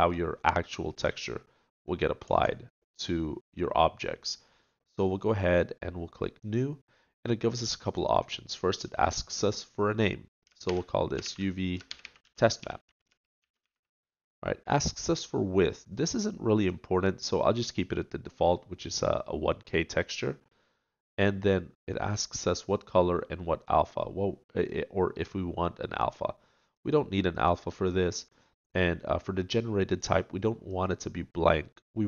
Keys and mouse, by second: 2.7-32.0 middle drag.